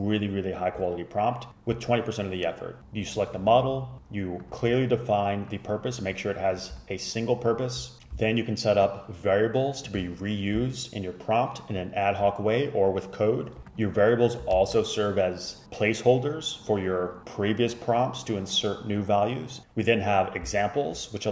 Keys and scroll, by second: 8.0 typing, 14.6 shift+super+Left.